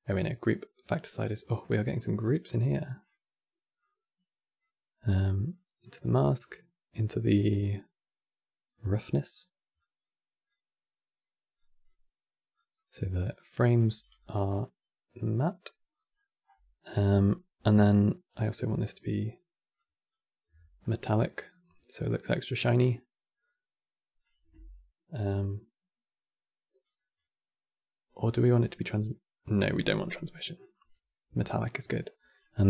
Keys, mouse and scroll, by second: 4.3 click, 6.1 click, 9.5-13.9 drag, 14.9 click, 15.9 middle click, 16.2-16.6 scroll up 2, 16.6-17.9 middle drag, 18.5-19.4 middle drag, 19.4-20.5 drag, 20.5-23.5 middle drag, 23.9-31.9 drag, 31.9 scroll down 2, 32.1-32.6 middle drag.